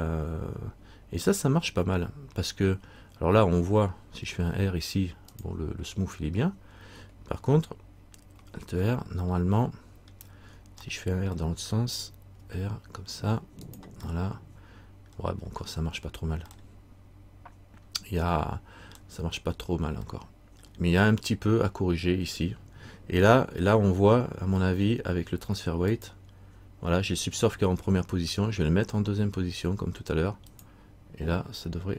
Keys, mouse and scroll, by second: 9.4 middle click, 11.0 middle click, 12.6 r, 14.3 middle click, 15.6-16.6 scroll up 1, 16.6 scroll up 2, 16.7 middle click, 19.7 scroll up 1, 20.7 middle click, 26.1 click, 30.6 click.